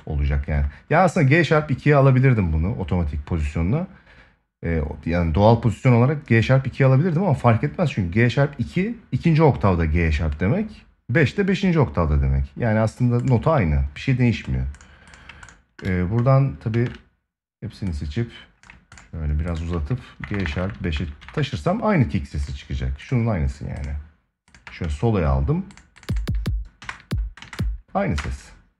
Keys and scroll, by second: 16.4 ctrl+a, 26.5 space.